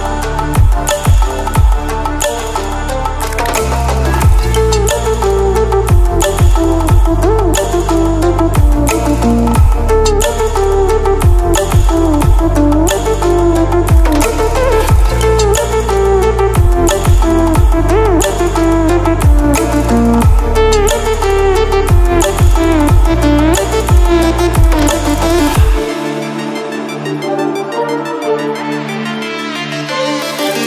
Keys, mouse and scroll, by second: 6.5 ctrl+alt+scroll down 1, 7.8 ctrl+alt+scroll up 1, 9.1 ctrl+alt+scroll up 1, 9.6 shift+click, 11.8-12.8 drag, 16.0 Right, 16.7 click, 17.7 ctrl+alt+scroll down 1, 18.5 ctrl+alt+scroll up 1, 20.3-21.0 ctrl+alt+scroll up 2, 22.2 click, 24.5 click, 27.0-30.6 drag.